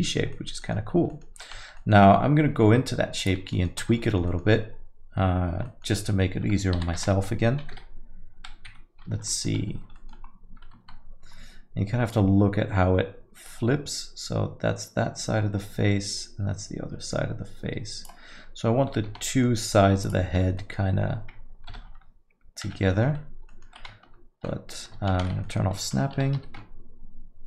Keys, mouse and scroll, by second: 0.3 alt+middle click, 0.6 middle click, 0.9 scroll up 2, 1.1 alt+middle click, 1.6 Tab, 1.7 alt+middle click, 2.2 scroll down 5, 2.5 Tab, 3.2 click, 3.5 middle click, 3.8 Tab, 4.0 alt+middle click, 4.3 middle click, 5.6 alt+middle click, 6.0 middle click, 6.7 r, 9.2 alt+middle click, 9.7 scroll up 2, 9.9 alt+middle click, 10.1 scroll down 1, 10.8 Tab, 10.8-11.4 scroll down 3, 12.1 click, 18.4-18.7 scroll up 2, 19.1 Tab, 19.1 scroll up 3, 19.3 middle click, 20.0 click, 20.6 middle click, 21.7 ctrl+l, 22.6 a, 22.9 alt+middle click, 23.5 middle click, 24.1 ctrl+Tab, 25.1 shift+Tab, 25.4 alt+middle click, 26.1 r.